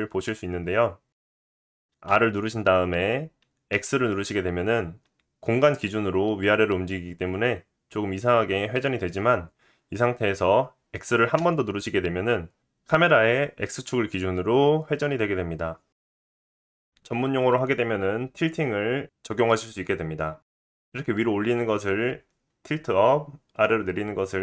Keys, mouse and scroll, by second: 2.1 r.